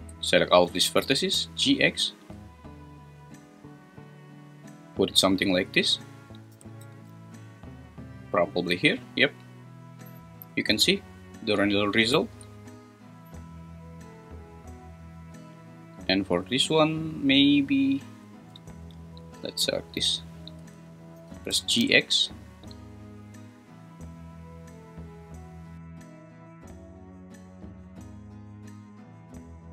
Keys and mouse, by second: 1.0 g, 1.3 x, 5.0 click, 6.5 g, 6.8 x, 8.3 click, 15.5 click, 15.7 click, 17.6 click, 19.2 click, 20.2 shift+click, 21.1 g, 21.5 x.